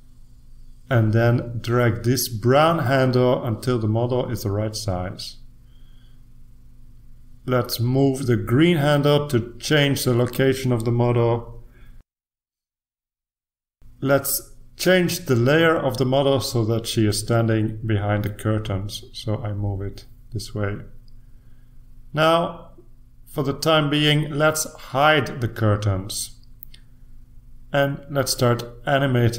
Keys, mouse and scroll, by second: 1.5-3.3 drag, 4.2-5.9 drag, 8.0-9.5 drag, 10.3-11.9 drag, 13.1-14.8 drag, 19.0 click, 19.9 click, 21.0 click, 22.7 click, 25.9 click.